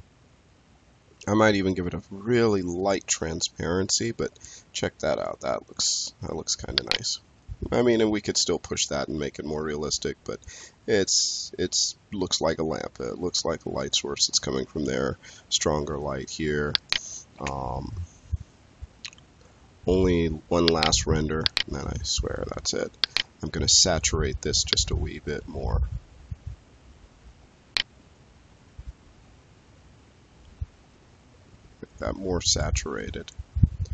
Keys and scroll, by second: 17.2 space.